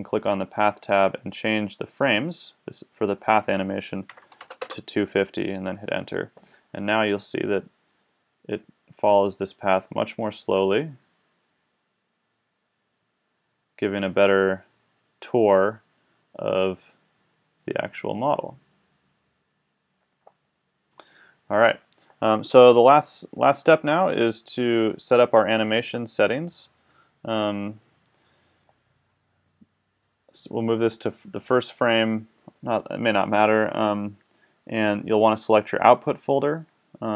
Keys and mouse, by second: 8.4 click, 26.8-32.5 drag, 37.1 click.